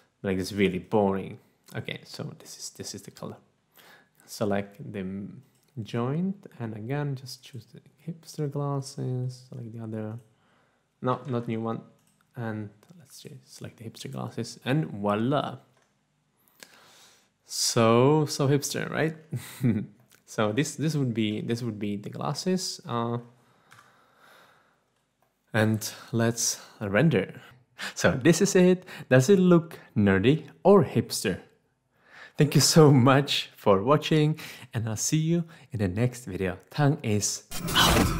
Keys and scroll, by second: 11.6 ctrl+z.